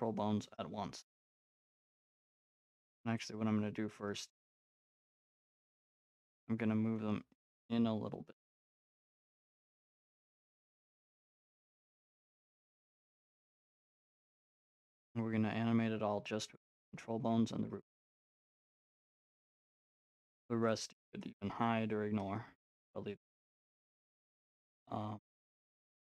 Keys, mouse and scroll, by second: 2.7 middle click, 3.2-5.3 drag, 5.9-7.2 middle drag, 7.2 click, 9.7-14.2 drag, 14.4-16.4 drag, 16.5 middle click, 17.3-19.9 drag, 19.9-22.0 middle drag, 22.0 click, 22.9-25.5 drag.